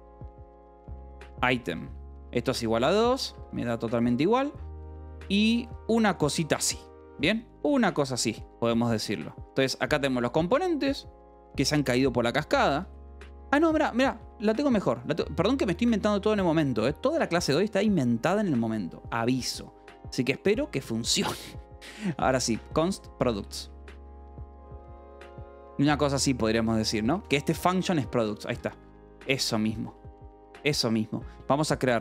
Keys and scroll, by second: 0.0-9.6 typing, 3.9 Escape, 11.2 Escape, 12.5-15.8 typing, 15.7 Escape, 18.8 shift+v, 19.2 p, 19.9 k, 21.0-25.6 typing, 26.1 Escape, 26.7-30.1 typing, 27.6 Escape, 28.4 Escape.